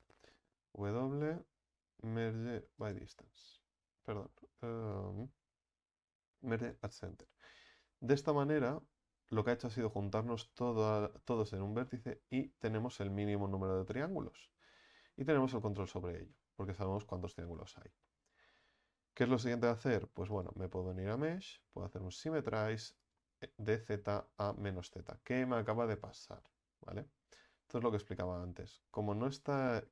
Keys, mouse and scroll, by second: 6.8 w, 7.4-11.4 middle drag, 11.4 right click, 11.9-15.2 middle drag, 15.2-15.5 scroll down 1, 15.5 Tab, 16.0 scroll down 3, 16.4-16.7 scroll up 2, 16.7 Tab, 17.4 a, 17.6 a, 18.0-23.1 shift+middle drag, 23.1-24.2 drag, 24.2-24.6 scroll down 4, 24.6-26.2 middle drag, 26.2 KP_1, 27.7-28.1 scroll up 1, 28.1-29.4 shift+middle drag, 29.4-29.9 drag.